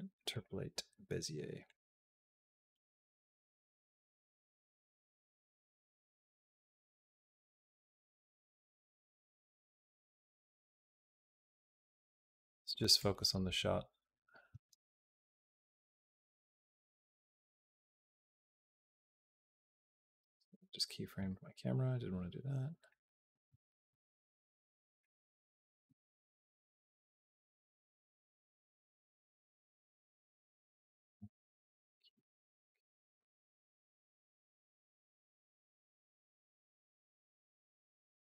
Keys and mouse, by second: 1.5-7.6 drag, 7.6 space, 11.3 click, 12.8 click, 14.3 q, 17.4 click, 21.0 click, 22.7 click, 23.3 x, 24.8 click, 25.1 b, 26.2 click, 27.5 click, 27.9 x, 30.4 click, 31.6 q, 34.1 click, 34.5 space, 35.8 space, 36.2 click, 36.4 space.